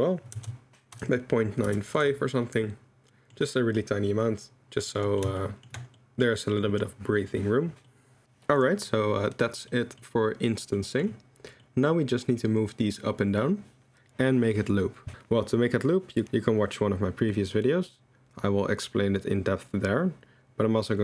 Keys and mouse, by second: 3.3-4.9 middle drag, 5.2-5.6 shift+middle drag, 5.9 middle drag, 6.7 middle click, 7.9-8.2 middle drag, 8.2 ctrl+z, 8.6 click, 9.7 middle click, 10.9 middle click, 11.6 middle drag.